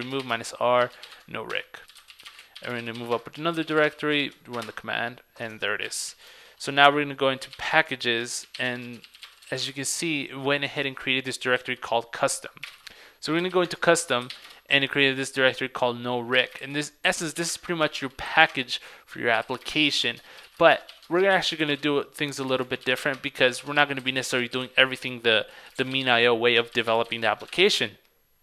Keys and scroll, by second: 4.3 super+v, 27.6 super+Tab.